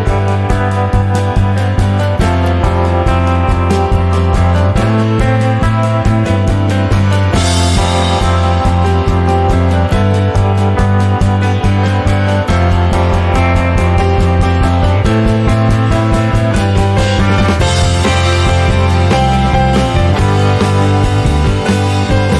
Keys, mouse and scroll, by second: 0.6 click, 1.7 middle click, 2.4 click, 3.4 click, 4.9 middle click, 5.2-5.7 scroll up 1, 5.7 click, 6.1 shift+middle click, 6.9 click, 9.0 middle click, 9.4 click, 9.9 middle click, 10.6 click, 11.7 click, 12.7 click, 13.2 middle click, 13.7 click, 14.6 click, 16.5-18.1 middle drag, 18.1 click, 18.6 middle click, 19.5 click, 21.5-22.3 middle drag.